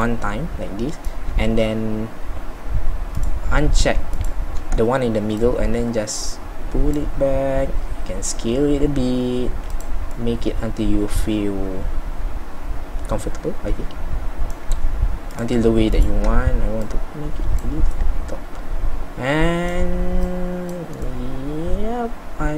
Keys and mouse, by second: 22.0 middle click.